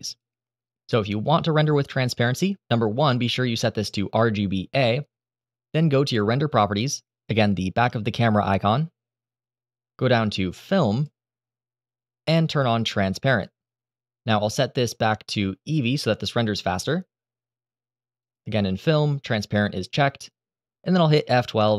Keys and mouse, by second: 6.3 click, 10.7 click, 13.0 click, 15.4-16.6 drag, 18.0 click.